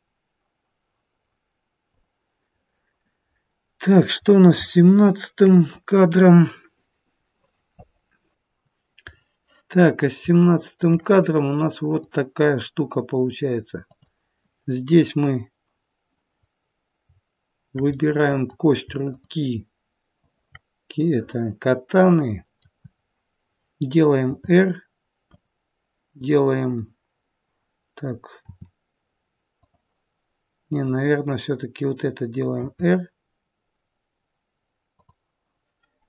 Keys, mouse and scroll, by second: 2.0 click, 3.6-4.7 scroll down 3, 4.2-6.8 scroll up 2, 4.7 shift+middle click, 9.1-10.2 scroll up 2, 10.2 scroll up 2, 10.3 shift+middle click, 12.0 click, 13.8 click, 18.0 middle click, 19.1 shift+click, 20.9 shift+click, 21.1 middle click, 24.2 r, 28.4 r, 30.5 click, 32.5 r.